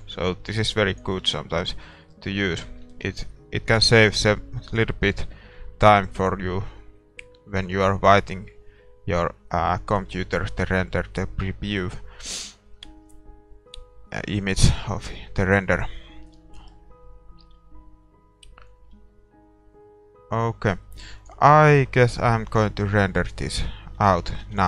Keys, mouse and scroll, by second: 1.9 ctrl+s, 1.9-9.9 middle drag, 9.9-24.6 drag, 21.2-23.5 middle drag, 24.1 shift+z.